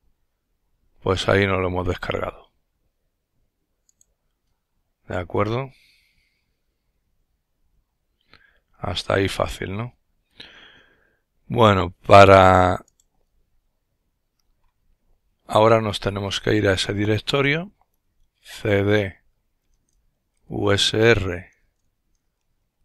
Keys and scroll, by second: 17.0-22.8 typing.